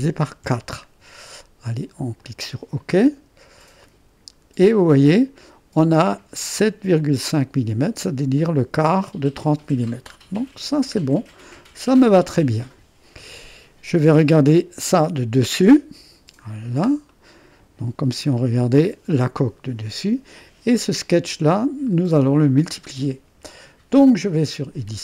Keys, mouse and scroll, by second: 0.5 4, 2.2-3.7 drag, 3.8 click, 4.9-5.5 scroll up 1, 5.5 middle click, 7.0-8.9 drag, 10.2-12.0 scroll down 1, 12.0-15.0 drag, 15.0 2, 15.7 middle click, 16.5 scroll down 1, 17.2-18.8 drag, 21.6-23.3 drag.